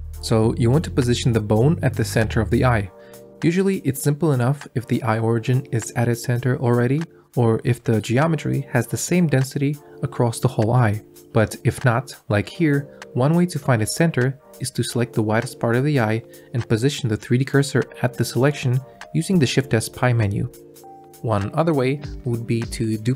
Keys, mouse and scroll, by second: 0.3 click, 2.0 click, 3.0 ctrl+click, 4.0-5.2 drag, 5.6 shift+z, 8.4-9.9 drag, 12.8 Tab, 14.0-15.5 drag, 16.6 shift+s, 22.2 Tab, 22.6 shift+d.